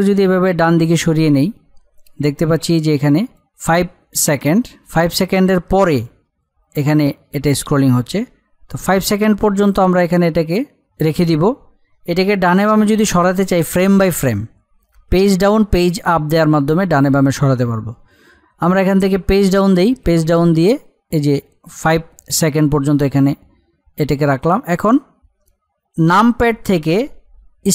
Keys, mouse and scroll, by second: 6.4-13.6 drag, 15.0 Page_Down, 19.4 Page_Down, 24.3 click.